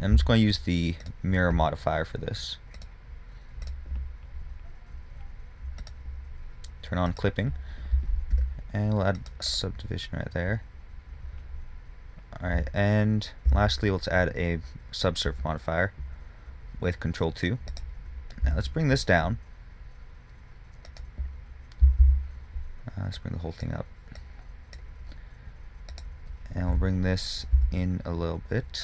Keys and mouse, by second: 0.5 x, 3.0-5.8 drag, 7.4-9.7 drag, 8.6 ctrl+r, 13.7 ctrl+2, 16.9 click, 18.0-21.2 drag, 18.7 g, 22.1 a, 22.3 a, 23.4-25.7 drag, 27.0 g.